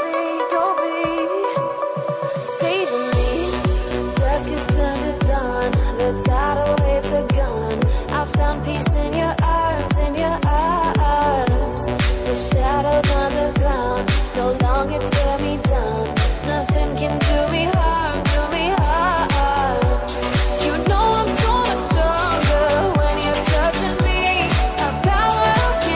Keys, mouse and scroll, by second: 1.3 click, 1.6-2.3 typing, 2.6 click, 4.4 scroll down 1, 5.8 scroll down 1, 6.4 click, 7.7 typing, 8.6 click, 10.0 scroll up 1, 10.5 click, 11.2 scroll up 1, 11.5-13.3 middle drag, 13.5-15.3 drag, 15.8 scroll up 1, 16.3-17.8 middle drag, 17.8 scroll down 1, 18.1 middle click, 18.6 scroll up 1, 19.3-25.9 drag.